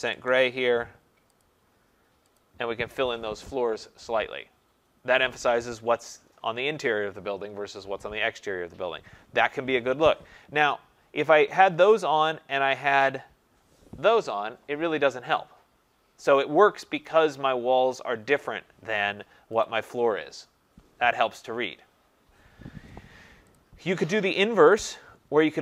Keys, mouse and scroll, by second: 0.0-0.1 typing, 1.4 click, 1.5 Tab, 2.4 click, 13.0 click, 19.7 click, 23.6 click, 24.9 click.